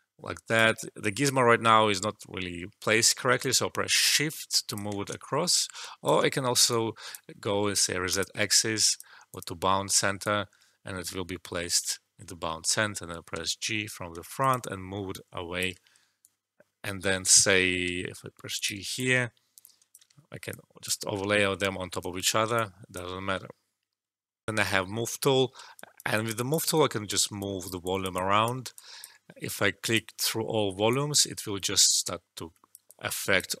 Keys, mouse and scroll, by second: 0.0-0.6 drag, 3.3 click, 3.3-5.4 shift+drag, 5.4-7.3 shift+drag, 7.3 alt+middle click, 8.1 click, 10.2-12.0 alt+drag, 12.0 alt+middle click, 13.3 g, 14.3 click, 14.6 alt+middle click, 15.1 alt+click, 15.7 alt+middle click, 16.2-17.8 alt+drag, 17.8 g, 18.5 click, 18.9 alt+click, 20.1 alt+shift+middle click, 20.4 alt+click, 21.3 alt+middle click, 21.9 alt+right click, 22.5-24.4 alt+drag, 24.4 alt+F12, 25.7 alt+click, 28.7 alt+click, 30.8-33.6 alt+drag.